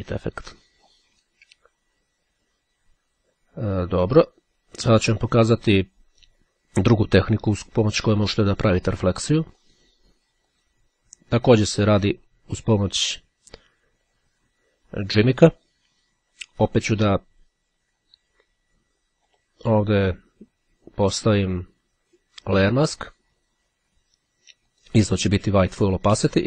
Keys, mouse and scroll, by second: 9.5 click, 10.7 click, 12.0 click, 15.7-19.9 right drag, 22.3-23.5 drag, 24.8 click.